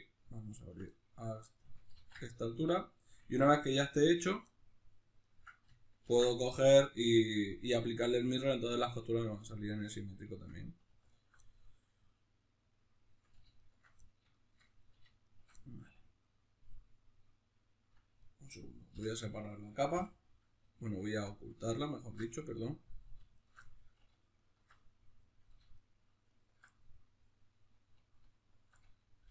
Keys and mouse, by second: 0.5 ctrl+right click, 0.9-4.1 middle drag, 1.9 ctrl+e, 4.1 right click, 4.5 middle click, 5.2 ctrl+right click, 6.0 ctrl+e, 9.1-11.1 middle drag, 11.1 alt+right click, 11.4-13.6 middle drag, 13.6 alt+shift+right click, 14.0-15.2 middle drag, 15.2 alt+shift+right click, 15.6-18.2 middle drag, 18.2 right click, 18.9 l, 20.9 alt+right click, 21.3-23.3 middle drag, 23.3 alt+shift+right click, 23.6 middle click, 24.3 alt+shift+right click, 24.7-25.7 middle drag, 25.7 alt+shift+right click, 26.7-29.3 middle drag.